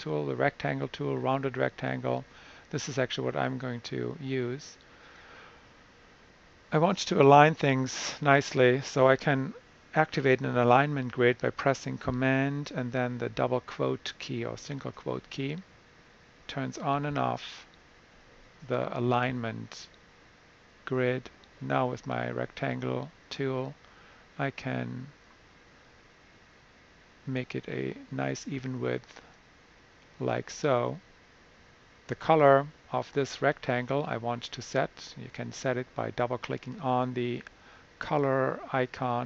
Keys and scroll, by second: 14.8 super+', 16.8 super+', 17.6 super+'.